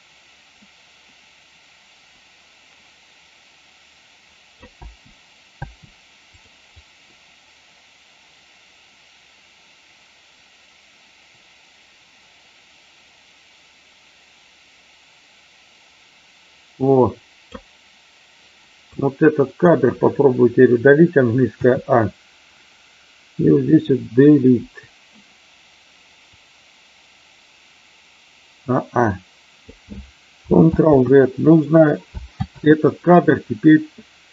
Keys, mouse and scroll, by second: 4.8 space, 6.4 click, 6.8-17.6 drag, 18.9-19.5 drag, 21.5 a, 24.5 Delete, 26.2-29.7 drag, 30.9 ctrl+z, 32.5 ctrl+z.